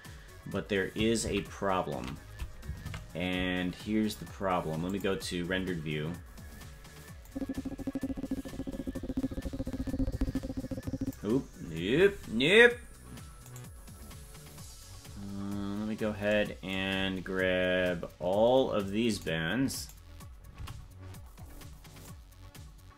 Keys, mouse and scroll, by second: 1.5 ctrl+z, 2.8 ctrl+Tab, 5.1 click, 7.3-11.2 drag, 13.5 right click, 14.2-16.8 scroll down 28, 16.8-18.5 scroll down 11, 19.1 right click, 19.8 right click, 20.5 c.